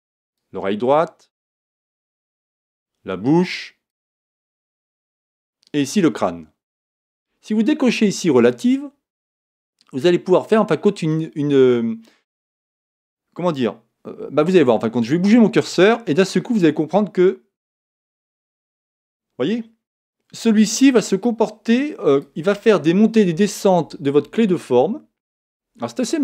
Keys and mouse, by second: 8.4 click, 15.1 click.